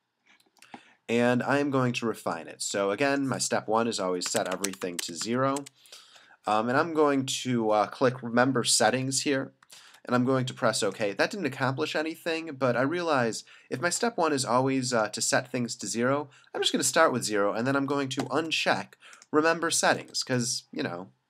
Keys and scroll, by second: 4.3 0, 4.5 Tab, 4.5 0, 4.7 Tab, 4.8 0, 5.0 Tab, 5.2 0, 5.6 Tab, 9.1 alt+super+=, 9.7 alt+super+-, 18.2 alt+super+=, 20.3 alt+super+-.